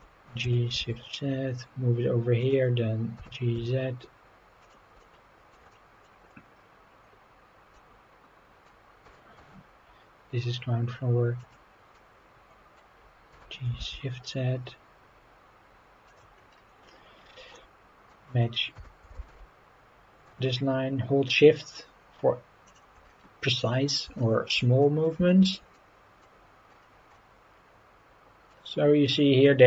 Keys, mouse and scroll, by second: 0.4 g, 0.8 shift+z, 2.4 click, 3.2 g, 3.5 z, 4.6-4.9 drag, 5.0-5.5 shift+middle drag, 5.7 middle drag, 6.2 scroll up 3, 7.7-8.7 middle drag, 9.0 g, 9.4 z, 11.4-11.9 drag, 11.9-12.7 middle drag, 13.3 g, 13.8 shift+z, 16.0 click, 16.4-17.5 scroll up 7, 17.5-18.1 middle drag, 18.7 g, 19.1 shift+z, 22.6 shift+click, 23.0 scroll down 2, 23.7 scroll down 1, 24.2 shift+middle click, 24.8 middle drag, 25.3 shift+middle click, 25.7-26.2 middle drag, 26.6-27.1 scroll up 4, 27.1-28.5 middle drag, 29.1-29.5 scroll up 4.